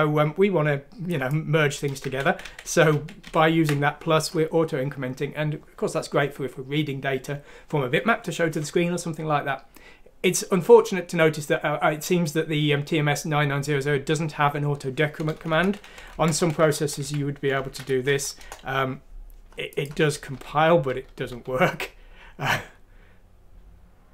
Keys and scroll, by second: 2.1 ctrl+z, 2.2-3.2 typing, 15.5 BackSpace, 15.9 Left, 16.1 Left, 18.1 shift+F6, 18.4 shift+Return, 20.3-21.3 typing.